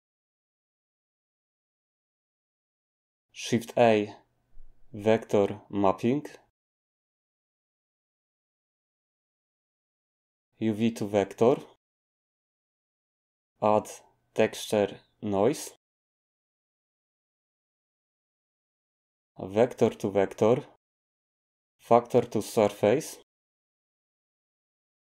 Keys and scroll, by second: 3.8 a, 13.7 a.